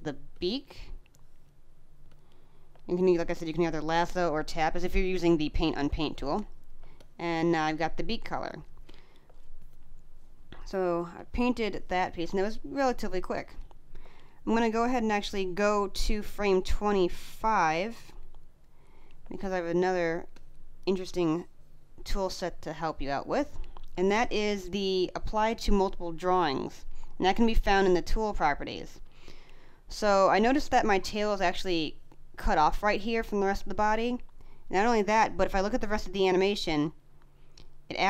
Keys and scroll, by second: 2.6 space, 6.7 space, 10.4 space, 13.0 space, 19.1 space, 23.8 space.